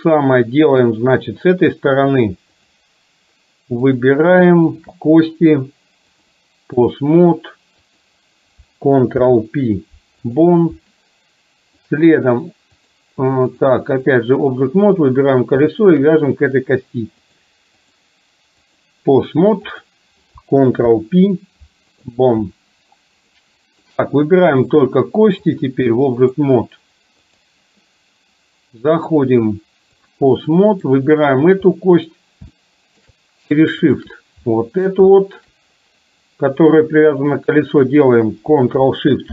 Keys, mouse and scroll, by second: 2.2 click, 4.0 click, 4.7 shift+click, 6.2 click, 8.0 click, 9.2 ctrl+p, 11.9-12.9 drag, 13.7 click, 15.1 drag, 16.0 shift+click, 17.9-18.9 drag, 19.7 click, 21.0 ctrl+p, 23.4 middle click, 24.6 click, 25.7 click, 28.9-30.2 drag, 30.6 middle drag, 31.7-32.1 middle drag, 32.6-33.1 shift+middle drag, 34.5-35.0 middle drag, 35.1 shift+middle drag.